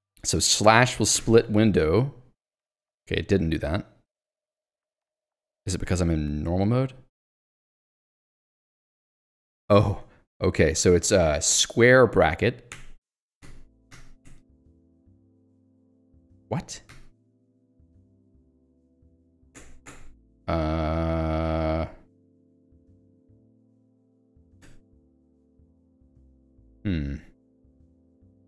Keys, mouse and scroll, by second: 1.2 /, 12.7 [, 13.4 ], 13.9 [, 14.3 ], 16.9 [, 17.4 ], 19.6 o, 24.6 f, 25.2 shift+f, 27.8 ctrl+z.